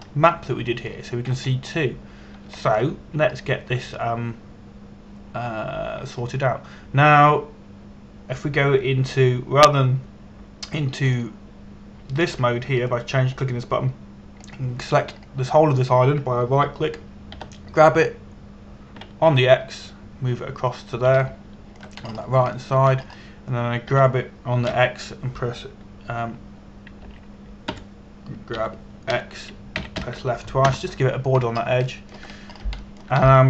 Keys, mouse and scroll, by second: 0.2 shift+middle click, 2.0 scroll down 1, 2.5 shift+middle click, 3.2-4.1 scroll down 1, 4.2 shift+middle click, 4.9-5.8 scroll up 1, 5.8-7.9 scroll down 1, 7.9-8.3 scroll up 1, 8.3-10.1 scroll down 1, 12.7 click, 16.9 right click, 19.0 g, 21.0 x, 22.3 click, 22.9 shift+scroll up 1, 23.7-24.1 scroll up 1, 24.2 shift+middle click, 24.7-25.4 scroll up 1, 25.6 g, 26.3 x, 28.8 click, 29.4 Escape, 30.2 g, 30.7 x, 31.4 click, 32.4 Return, 33.0-33.4 scroll down 1.